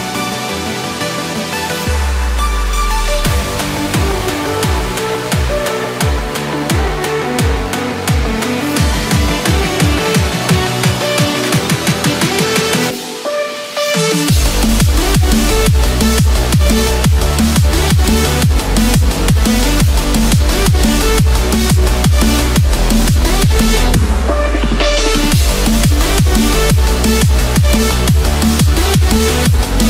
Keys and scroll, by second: 16.1 Return, 17.9 ctrl+z, 28.7 ctrl+z.